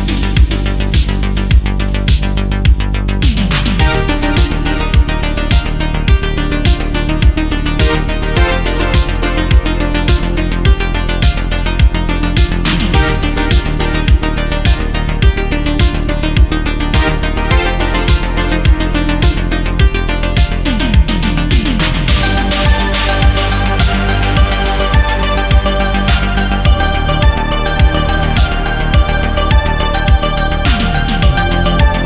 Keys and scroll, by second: 2.6 ctrl+z, 5.4 ctrl+z, 5.7 ctrl+z, 6.7 space, 7.2 ctrl+z, 8.4 space, 9.6 ctrl+z, 13.9 ctrl+z, 15.0 ctrl+z, 17.5 ctrl+z, 29.8 ctrl+z.